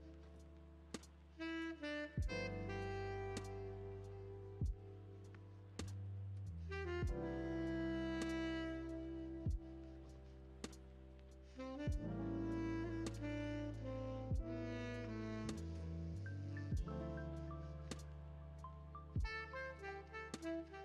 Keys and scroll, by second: 1.4 ctrl+z, 10.3 ctrl+Home, 16.5 v.